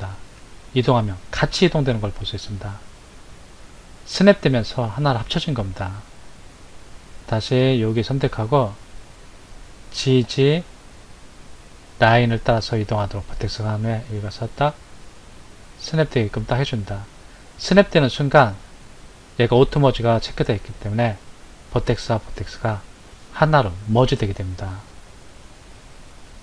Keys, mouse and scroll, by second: 8.2 click, 10.0 g.